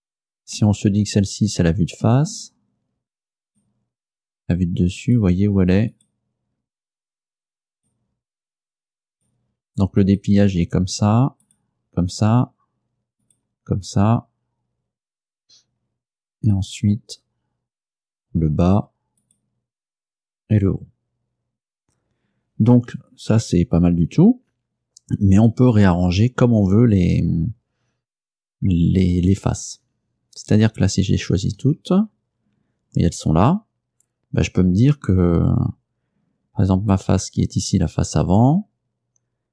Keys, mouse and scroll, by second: 0.6-2.3 middle drag, 3.5 right click, 5.1 right click, 6.0 right click, 6.9 right click, 7.8 right click, 9.2 right click, 10.1 right click, 11.5 right click, 13.3 right click, 16.4 right click, 19.3 right click, 31.7 a, 37.0 right click.